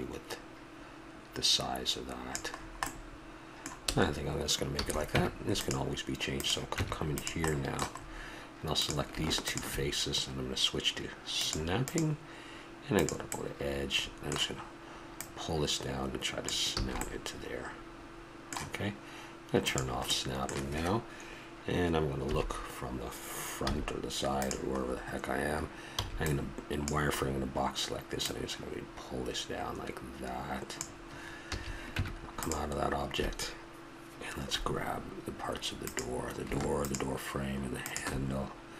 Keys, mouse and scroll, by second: 2.6 middle click, 2.9 middle click, 4.7 a, 5.1 Tab, 6.3 right click, 6.7 Tab, 7.5 middle click, 8.0 middle click, 8.8-11.3 drag, 12.7 click, 13.3 middle click, 13.4 click, 13.6-15.1 middle drag, 15.2-16.9 drag, 16.8 a, 16.9 middle click, 17.4 middle click, 19.6 click, 20.1-21.3 middle drag, 22.2 KP_3, 23.7 z, 24.8 middle click, 26.0 b, 28.2-30.0 drag, 31.4 a, 31.9 Tab, 34.4-35.8 middle drag, 35.8-38.7 right drag.